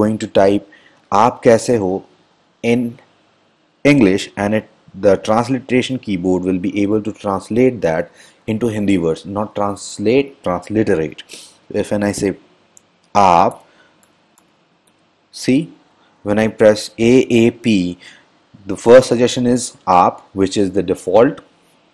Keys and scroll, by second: 12.4 k, 13.7-15.5 typing.